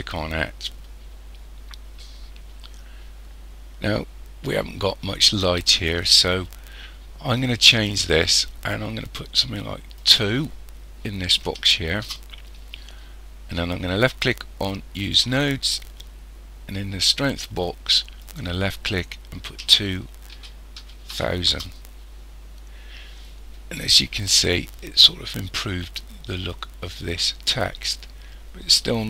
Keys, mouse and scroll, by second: 10.0 click, 15.0 click, 18.2 click.